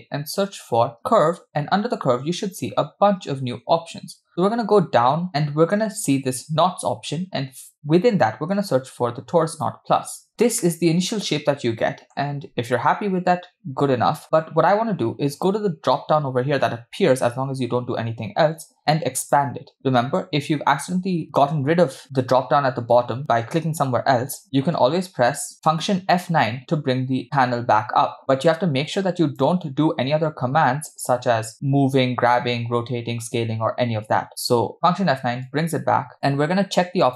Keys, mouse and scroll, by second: 11.8 middle click, 12.7 scroll up 4, 13.0-14.2 middle drag, 19.8 click, 21.4 click, 25.5 F9, 34.7 F9.